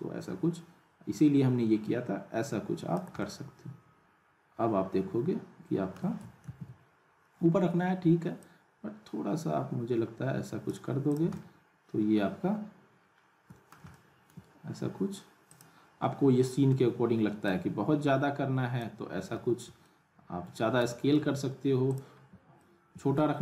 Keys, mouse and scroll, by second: 3.2-6.0 alt+middle drag, 6.4 ctrl+z, 8.4-10.9 drag, 11.1 click, 11.3-13.8 alt+middle drag, 13.9-14.5 middle drag, 15.5 click, 16.7 r, 17.5-19.0 drag, 19.1 scroll down 1, 19.3 w, 19.8-20.5 alt+middle drag, 21.2 ctrl+z, 21.9 click, 22.1 scroll up 1, 22.6-23.2 alt+middle click.